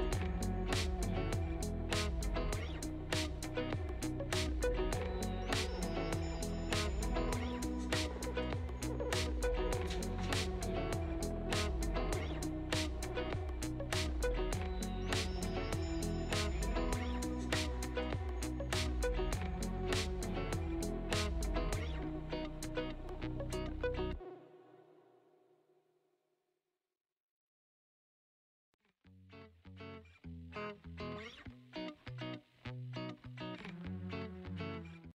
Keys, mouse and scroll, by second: 0.2 g, 8.4 click, 9.2-10.1 scroll up 2, 9.5-10.9 middle drag, 10.9-11.9 scroll down 1, 11.9 click, 15.7-17.2 drag, 17.9 shift+d, 19.3 r, 20.2 g, 21.3 r, 22.2 g, 22.8 r, 23.9 click, 31.4 click, 31.9 g, 34.6 click.